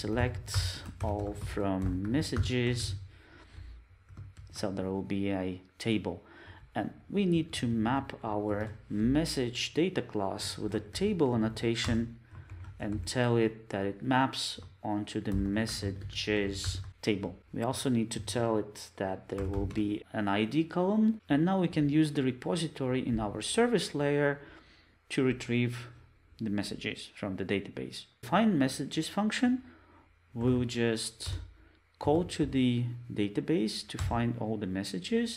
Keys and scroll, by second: 4.4 alt+shift+Left, 11.9 Return, 28.1 super+z, 31.2 Return.